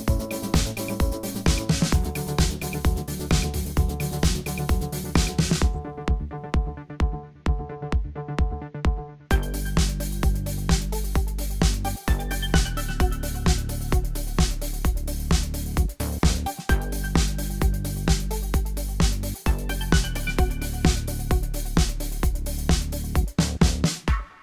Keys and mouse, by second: 6.3 ctrl+z, 7.0 g.